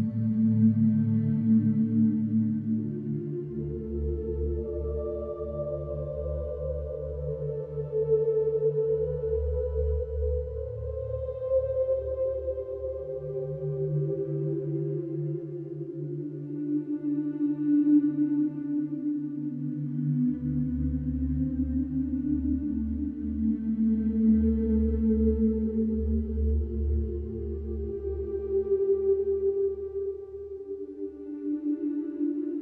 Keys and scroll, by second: 0.3 Escape, 0.4 ctrl+z, 7.4 ], 9.0 4, 9.3 3, 10.2 ctrl+d, 10.3 Escape, 12.0 ctrl+d, 12.2 Escape, 14.6 ], 15.2 ], 16.4 ctrl+z, 23.9 ], 27.2 4, 29.6 3, 30.1 ].